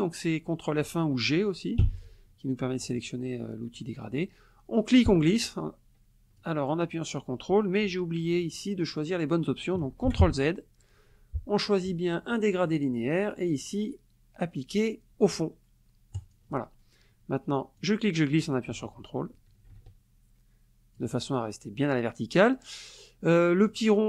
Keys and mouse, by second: 1.8 g, 4.9-6.6 drag, 10.1 ctrl+z, 12.6 click, 16.1 click, 17.8-21.1 drag, 23.7 click.